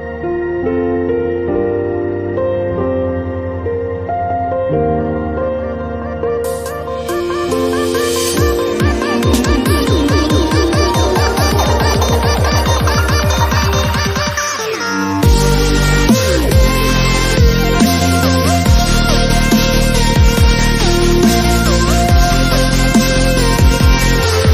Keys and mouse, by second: 0.0-1.8 typing, 2.8 middle click, 3.5 z, 4.3 ctrl+KP_Add, 4.9 ctrl+e, 5.2 ctrl+Tab, 7.8 middle click, 9.5 ctrl+e, 10.0 ctrl+Tab, 10.4 ctrl+l, 11.0 ctrl+KP_Add, 11.8 u, 12.2 g, 12.8 a, 13.0 click, 13.2 g, 14.1 click, 14.5 middle click, 15.0 click, 15.2 click, 16.0 ctrl+Tab, 16.7 ctrl+Tab, 17.1 a, 17.3 space, 17.7 click, 18.1 click, 18.2 middle click, 18.4 click, 18.7 ctrl+Tab, 19.1 z, 19.7 x, 19.9 click, 20.2 ctrl+Tab, 20.4 click, 20.5 right click, 20.6 click, 21.5 ctrl+e, 21.5 right click, 21.9 z, 22.1 u, 22.8 ctrl+z, 23.0 ctrl+Tab, 23.6 ctrl+KP_Add, 24.0-24.5 typing.